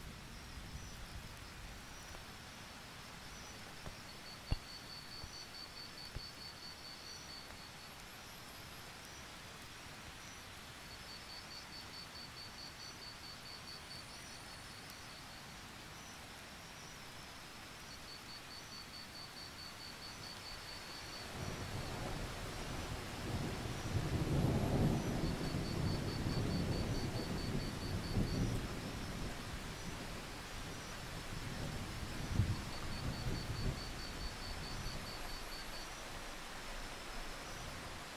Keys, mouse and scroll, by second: 1.1 Delete, 1.7-12.8 drag, 12.8-13.2 alt+scroll down 1, 13.2-13.5 scroll up 2, 15.2 click, 15.4 alt+scroll down 1, 15.6-16.6 scroll up 1, 16.6-17.6 alt+scroll up 1, 17.6-18.3 scroll up 1, 18.4-19.3 scroll down 1, 19.4 click, 19.9 alt+click, 20.6-23.1 drag, 23.1-23.7 alt+scroll up 1, 23.7 click, 24.8 click, 25.1 alt+scroll down 1, 25.3-25.7 scroll up 1, 25.7-26.3 scroll down 1, 26.3 alt+scroll down 1, 26.4-27.2 alt+scroll up 2, 27.2 click, 27.4 scroll down 1, 27.6-29.4 scroll up 2, 29.4 click, 32.2-33.4 scroll down 1, 33.4-34.6 drag, 35.3 ctrl+z, 36.6-38.1 drag.